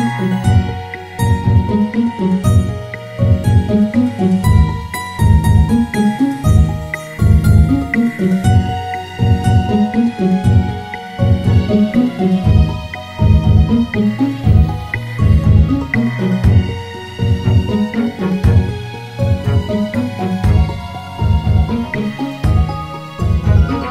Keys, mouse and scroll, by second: 2.9 Tab, 4.8 ctrl+r, 11.7 Tab, 14.3 click, 16.0-19.1 drag, 22.1-23.9 drag.